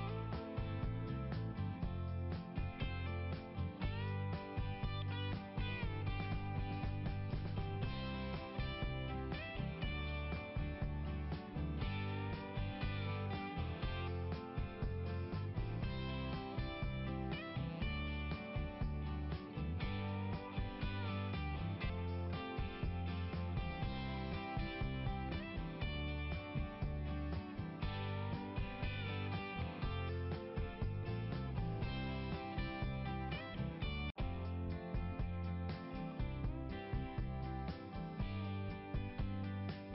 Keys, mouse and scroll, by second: 3.6 click, 5.0 click, 7.3-7.7 scroll down 2, 10.2-10.6 scroll up 2, 14.8 click, 20.5 click, 27.0 click, 30.2 click, 33.5 click, 34.5 click, 37.6 click.